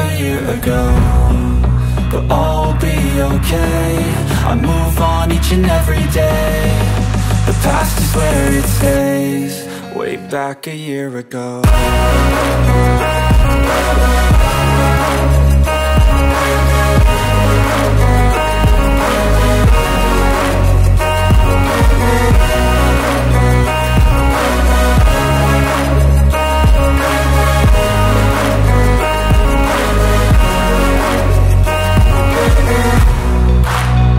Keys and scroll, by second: 0.3 e, 1.8 space, 2.1 p, 3.6 space, 7.6 Return, 8.8 1, 9.5 Return, 12.4 Up, 13.3 Return, 15.4 Return, 17.7 Return, 19.7 Return, 20.1 space, 20.4 e, 22.8 space, 23.4 p, 24.7 space, 24.8 Escape, 28.3 Return, 29.4 1, 30.0 Return, 31.1 ,, 32.2 Up, 34.0 Up.